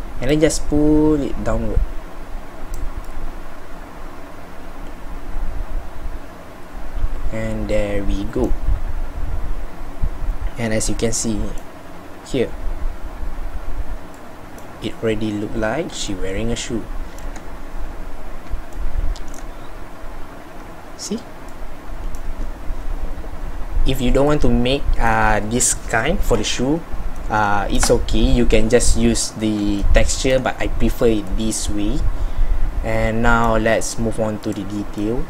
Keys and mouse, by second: 27.6 middle click, 35.0 middle click.